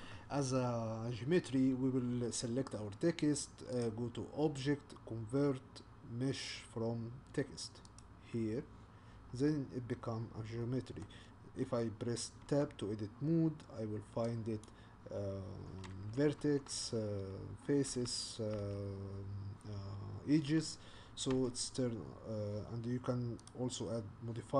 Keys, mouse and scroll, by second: 9.5-12.4 middle drag, 12.4-13.6 scroll up 1, 13.6-14.4 scroll up 3, 14.6 click, 16.4 2, 17.9 3, 18.6 2, 21.3 Tab, 21.9-23.3 scroll down 3, 23.3-24.5 scroll down 2.